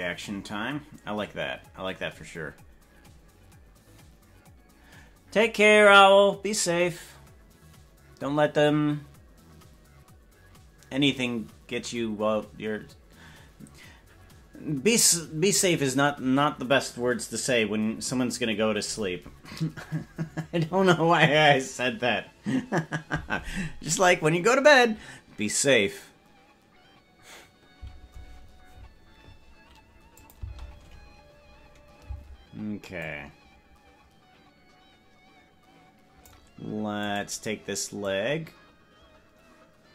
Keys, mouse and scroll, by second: 30.2 click, 30.6 space, 33.0-36.4 drag, 33.0 space, 38.1-39.9 drag, 38.1 right click.